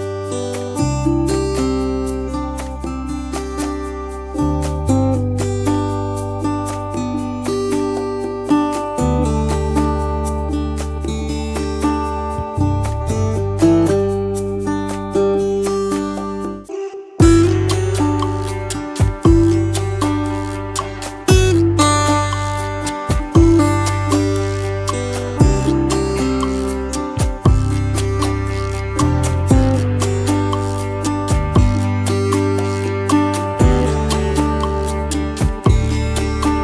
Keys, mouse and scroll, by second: 3.4 double click, 4.9 scroll up 1, 6.3-7.8 scroll down 1, 7.8 double click, 12.1 space, 16.3 double click, 16.4 space, 16.9 alt+scroll, 17.0 alt+scroll up 1, 17.1 space, 17.5 double click, 17.6 space, 20.4 right click, 21.6 double click, 25.1 right click, 26.1 double click, 26.3 space, 28.7 ctrl+shift+], 30.5 ctrl+shift+], 33.8 space, 34.3 t.